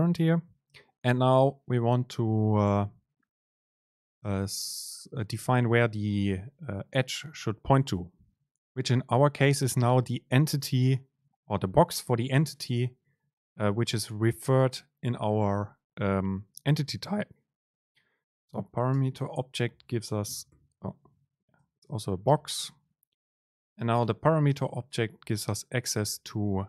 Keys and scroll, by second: 19.1 super+space.